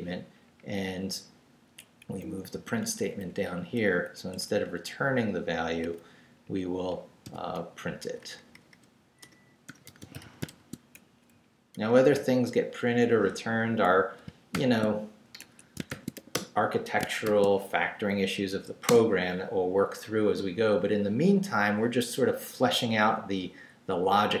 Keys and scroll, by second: 2.0 Right, 2.5 x, 2.8 Down, 4.3 Left, 6.4 Right, 7.2 i, 8.0 BackSpace, 9.4-11.7 typing, 11.3 shift+Right, 12.1 Right, 13.6 Right, 14.2 shift+Right, 14.5 shift+0, 15.4 shift+Escape, 15.9 shift+;, 16.1 shift+w, 16.3 Return, 17.0 shift+Return, 17.2 shift+;, 17.8 shift+Up, 18.9 Return.